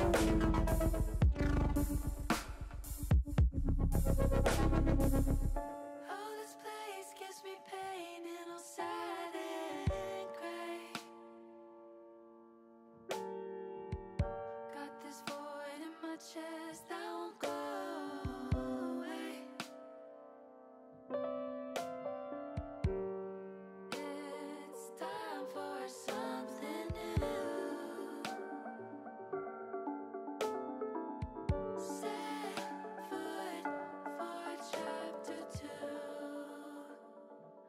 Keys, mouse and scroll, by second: 1.8 click, 2.9 click, 6.4 middle click, 9.6-12.2 drag, 13.9 KP_0, 16.9 click, 17.7 Delete, 19.4 KP_0, 22.4 shift+d, 22.9 click, 23.4 click, 25.4 middle click, 25.9-27.2 drag, 27.6 KP_0, 36.1 shift+middle click, 36.4 shift+middle click, 36.6 shift+middle click, 36.7 shift+middle click, 36.9 shift+middle click.